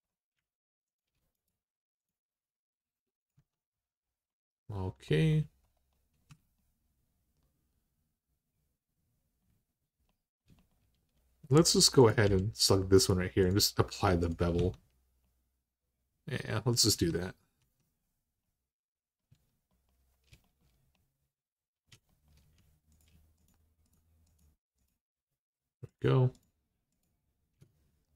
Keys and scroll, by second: 3.1 Tab, 6.1 Tab, 10.7 typing, 12.0 i, 14.3 Tab, 16.7 Tab, 17.4 Tab, 19.1 Tab.